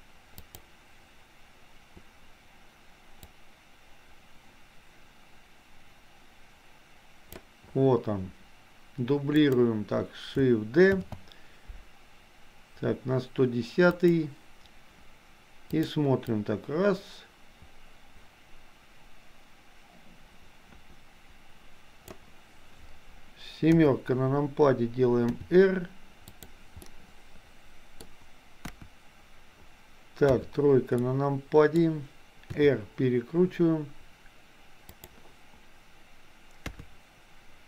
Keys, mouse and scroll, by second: 0.5 click, 3.4-7.5 drag, 9.4 click, 11.1 shift+d, 15.7 click, 16.5-22.2 drag, 23.7 KP_7, 25.4 r, 26.9-28.0 middle drag, 28.6 KP_1, 31.1 middle click, 32.6 r, 36.6 KP_3.